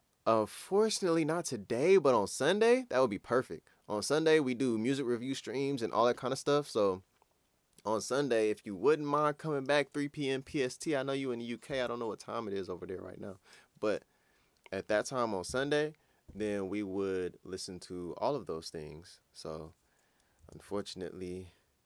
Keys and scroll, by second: 20.5 super+s.